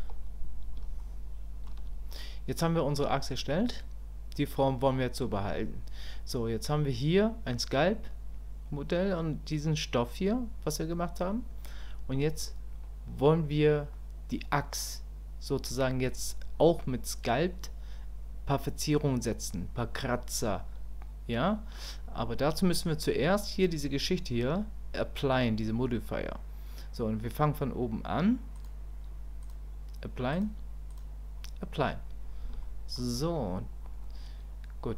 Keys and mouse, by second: 0.0 KP_1, 1.0 shift+click, 28.7 click, 30.3 click, 32.6 shift+click.